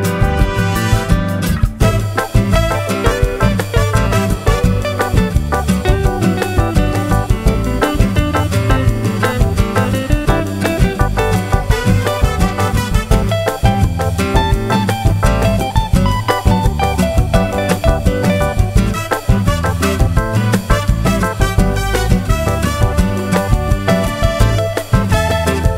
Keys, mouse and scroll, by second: 1.1 shift+click, 2.0 shift+click, 2.3 shift+click, 3.5 shift+click, 4.5-5.7 shift+drag, 5.8 shift+click, 7.0 shift+click, 8.1 shift+click, 10.2 shift+click, 10.7 shift+F1, 10.9 shift+click, 11.7 -, 12.5 click, 13.7-14.7 ctrl+drag, 15.1-16.2 ctrl+drag, 16.8 ctrl+click, 18.2 click, 19.3 click, 20.8 KP_Add, 21.5 click, 23.4 click, 24.4-25.7 drag.